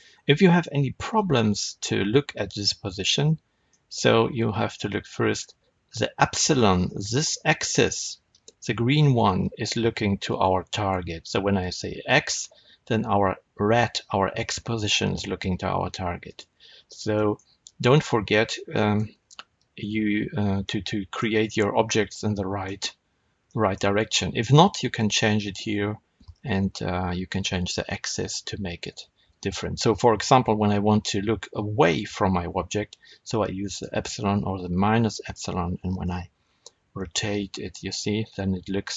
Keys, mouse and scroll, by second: 0.0-1.1 scroll down 1, 1.1-11.5 middle drag, 11.5 click, 16.2 click, 17.0-33.6 middle drag, 19.0 Tab, 33.6 click, 35.1 click, 36.4 r.